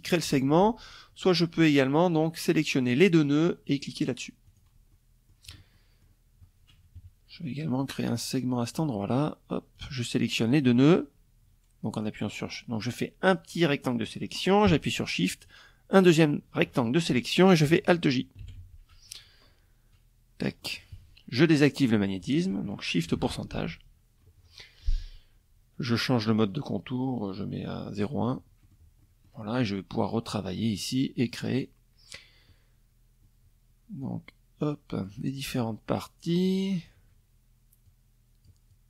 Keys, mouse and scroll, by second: 0.7 click, 3.0 click, 3.4 middle click, 4.3 middle click, 4.4 click, 5.5 KP_Subtract, 6.6 click, 8.3 shift+click, 10.5-12.8 drag, 14.0 shift+click, 17.0 alt+j, 18.5 click, 23.3 click, 25.0 click, 26.5 click, 27.1 middle click, 27.6 click, 29.3 click, 32.6-33.8 drag, 34.8 click, 36.4 click, 37.2-38.8 drag.